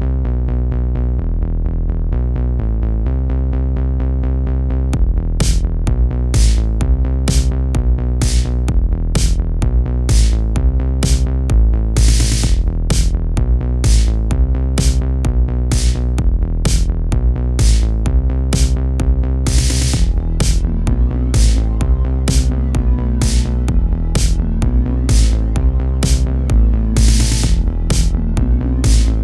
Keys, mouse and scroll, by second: 0.0 g, 1.2 click, 2.0 click, 2.5 g, 4.0 click, 4.4 g, 6.1 click, 6.3 g, 7.6 shift+middle click, 8.3 click, 8.7 g, 10.1 click, 10.4 g, 11.4 click, 11.6 g, 13.2 click, 13.5 g, 14.6 click, 15.0 g, 15.9-16.4 scroll down 1, 16.4-16.8 scroll down 2, 16.8 middle click, 17.4-17.8 scroll up 1, 17.8 shift+middle click, 18.6-19.3 scroll up 4, 19.3 2, 19.4 click, 19.9 middle click, 20.7-21.3 scroll down 1, 21.3 g, 23.2 click, 23.6 g, 24.9-26.0 middle drag, 26.0-26.8 scroll up 1, 26.8 click, 27.6 g, 28.4 click.